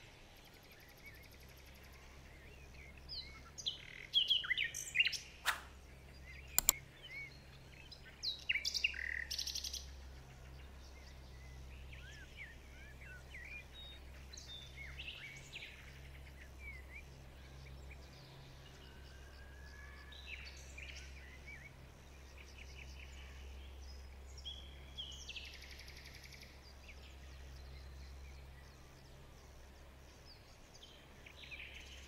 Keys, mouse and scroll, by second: 2.2 alt+scroll down 2, 2.8 alt+scroll down 1, 4.2 alt+scroll up 1, 5.1 shift+click, 7.5 alt+scroll down 1, 8.0-8.4 alt+scroll up 2, 8.4 alt+scroll down 2, 9.4 alt+shift+click, 12.6 ctrl+shift+click, 17.7 alt+scroll up 1.